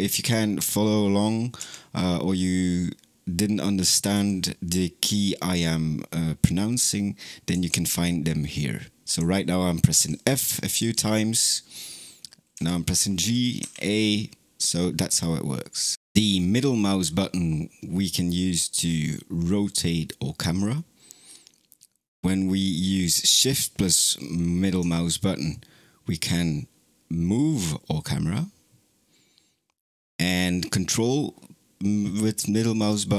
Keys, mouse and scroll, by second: 1.4 d, 4.0 f, 7.4 f, 9.0 f, 9.8 f, 10.6 f, 12.4 g, 13.4 a, 16.7-20.4 middle drag, 25.4-29.0 shift+middle drag, 33.0-33.1 ctrl+middle drag.